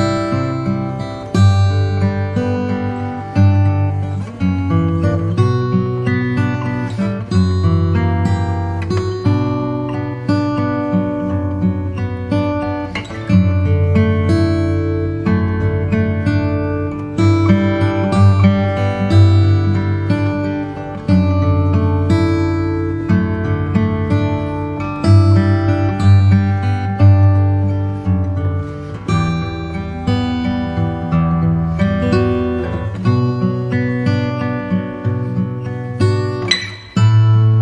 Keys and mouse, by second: 1.5 ctrl+j, 3.0 click, 3.9 middle click, 9.8-11.5 right drag, 13.1 click, 14.7-15.8 right drag, 16.1 click, 17.4 KP_1, 21.0 click, 22.2 click, 27.2 click, 28.5 click, 31.0 KP_1, 31.1 g, 35.9 click, 36.8 click.